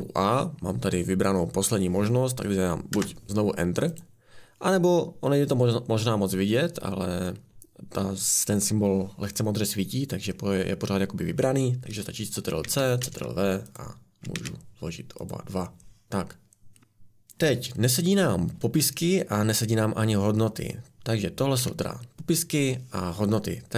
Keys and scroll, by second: 2.9 Return, 12.7 ctrl+c, 13.0 ctrl+v, 14.4 ctrl+v, 21.6 Escape.